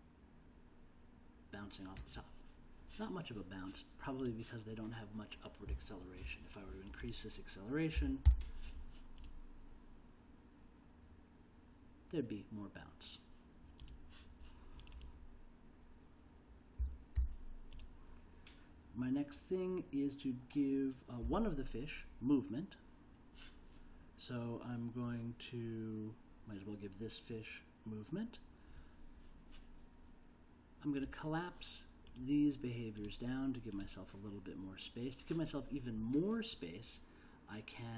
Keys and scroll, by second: 7.9 5, 8.2 0, 16.8 1, 17.2 0.